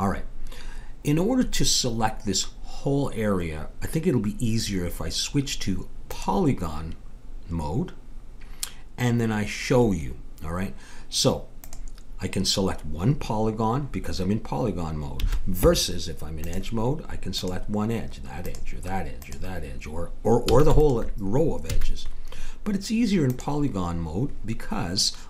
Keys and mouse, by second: 6.0-7.9 drag, 11.6-13.5 drag, 15.2 a, 16.4-23.3 drag, 20.4 a, 21.7 a, 24.9 click.